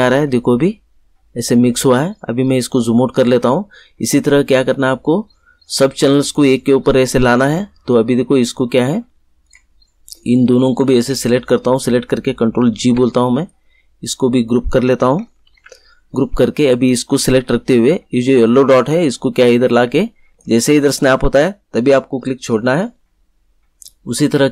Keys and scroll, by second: 12.7 ctrl+g, 15.4 ctrl+g.